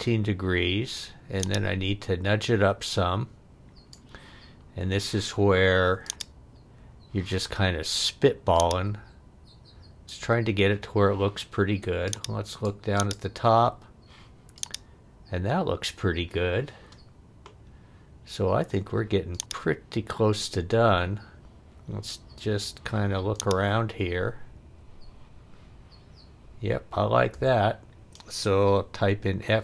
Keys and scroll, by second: 29.1 f.